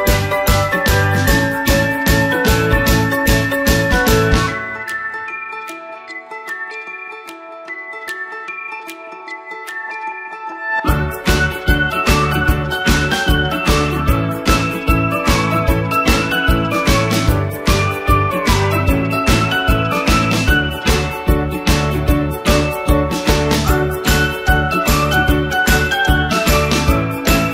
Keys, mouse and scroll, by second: 0.7 typing, 1.1 click, 10.9-11.3 typing, 11.5 click.